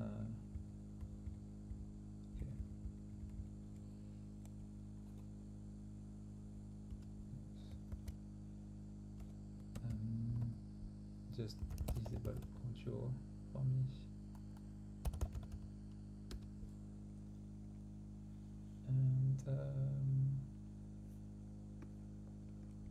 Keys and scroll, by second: 1.3 Down, 7.8 ctrl+v, 13.5 typing, 22.7-22.9 typing.